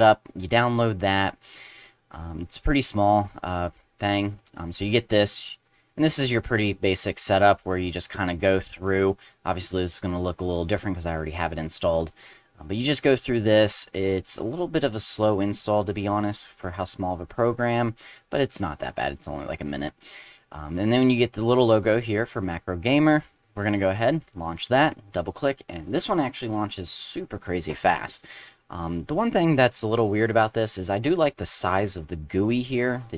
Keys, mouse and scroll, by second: 0.4 click, 4.4 click, 6.0 click, 6.2 click, 14.2 click, 17.7 click, 19.1 click, 20.1 click, 24.2 click, 24.4 click, 26.6 click, 28.3 click.